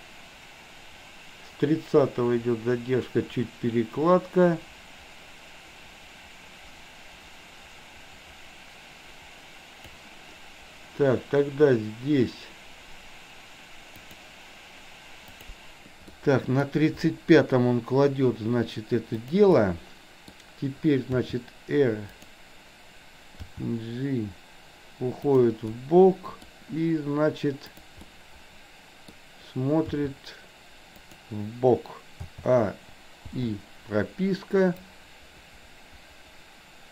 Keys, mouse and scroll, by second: 14.2 click, 15.4 click, 16.1-16.7 middle drag, 19.2 drag, 19.6-20.4 middle drag, 21.2 r, 23.4 g, 25.7-26.6 middle drag, 27.8 drag, 28.1-29.2 middle drag, 29.9 r, 32.3 a, 33.4 i, 34.8-36.9 drag.